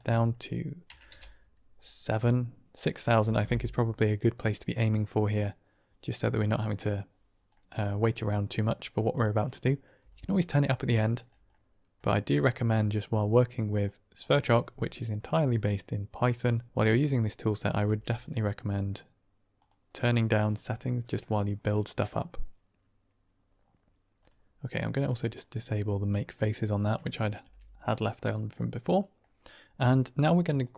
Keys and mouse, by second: 7.4-8.0 middle drag, 8.1-8.4 middle drag, 9.7 click, 9.9 typing, 11.5 middle click, 12.4 drag, 13.0 click, 17.2-17.8 drag, 17.8 g, 24.1 click, 25.0 click, 26.3 middle click, 27.1 click, 27.9 g, 28.4-29.9 middle drag, 30.1 click.